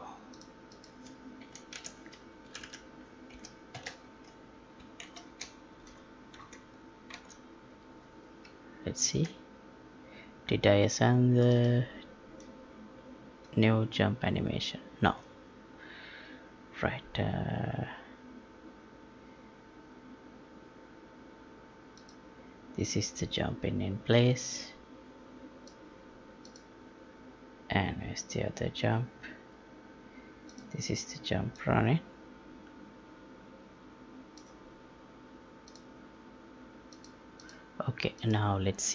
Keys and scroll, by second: 1.7 ctrl+v, 2.4 Left, 5.0 ctrl+shift+s, 6.4 alt+Tab.